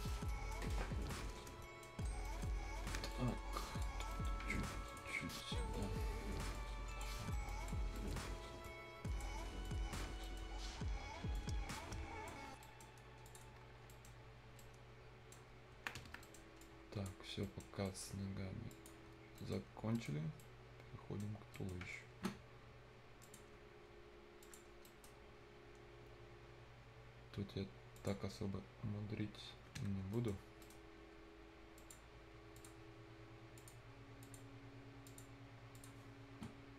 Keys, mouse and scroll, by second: 0.0 right click, 0.2 scroll up 1, 0.5 right click, 0.8 scroll down 1, 1.1 right click, 2.0 scroll up 1, 2.3 right click, 2.5 scroll up 1, 3.1 right click, 3.6 click, 4.1 right click, 4.9 click, 6.0-6.6 scroll up 1, 6.6 click, 7.2 scroll up 1, 7.5 click, 7.8 scroll down 1, 8.0 right click, 8.7 click, 9.4 scroll up 1, 9.7 click, 10.1 scroll down 1, 10.2 right click, 11.4 click, 12.5 scroll down 1, 12.6 right click, 13.3 click, 13.5 scroll down 1, 13.9 right click, 14.2 scroll up 1, 14.6 right click, 15.4 scroll down 1, 15.8 Escape, 16.2 right click, 16.4 scroll down 1, 16.6 click, 17.2 scroll up 1, 17.5 right click, 17.7 scroll down 1, 17.9 right click, 18.2 scroll up 1, 18.7 click, 19.1 scroll down 1, 19.4 right click, 19.8 scroll up 1, 20.0 right click, 20.2 scroll down 1, 20.7 right click, 21.4 scroll up 1, 21.6 right click, 23.2 click, 24.7 scroll down 1, 24.9 right click, 24.9 right click, 25.2 scroll up 1, 28.0 click, 29.6-30.2 scroll down 2, 29.8 Escape, 30.2 right click, 30.4-31.4 scroll up 2, 30.6 right click, 31.8 click, 31.8 click, 32.1-32.6 scroll up 1, 32.6 click, 32.8 scroll down 1, 33.0-33.6 scroll up 1, 33.6 click.